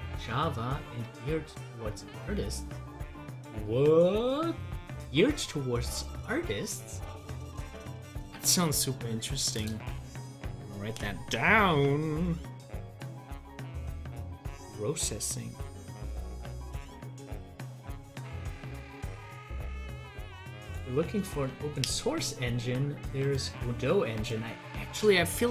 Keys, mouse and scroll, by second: 23.2 click.